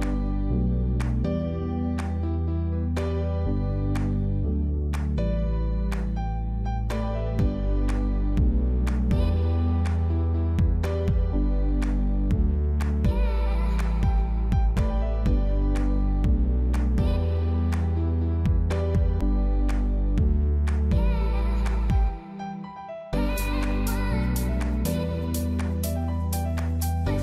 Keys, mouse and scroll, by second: 0.2 shift+click, 0.6 middle click, 1.2 click, 1.9 ctrl+z, 2.5 click, 2.9 click, 3.8 middle click, 4.1-4.5 scroll down 3, 4.2 middle click, 5.0 ctrl+z, 5.1 middle click, 5.8 scroll down 1, 6.3 click, 6.5 middle click, 7.0 g, 13.2 middle click, 14.3 scroll up 2, 14.5 middle click, 15.1 click, 15.3 middle click, 15.9 g, 18.5 middle click, 21.1 middle click, 22.3 shift+middle click, 22.3 scroll up 2, 22.5 middle click, 23.0 Tab, 23.1 middle click, 23.6 ctrl+2, 23.9 Tab, 24.4 middle click, 25.4 middle click, 26.2 ctrl+r.